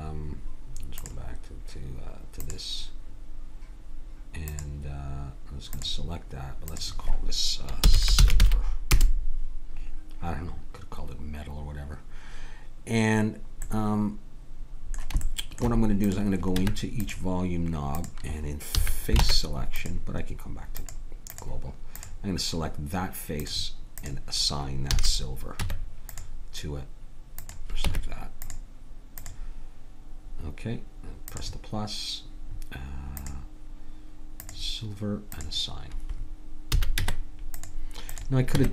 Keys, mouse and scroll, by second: 1.0-4.3 drag, 4.5-6.3 drag, 6.7-7.8 drag, 13.6 middle click, 14.5 middle click, 16.6 Tab, 18.7 a, 19.2 ctrl+Tab, 20.8-25.6 drag, 24.9 a, 25.6 Tab, 27.9 Tab, 31.4-33.0 drag, 33.2-35.0 drag, 35.4 click, 36.7 a, 37.0 Tab, 38.6 Tab.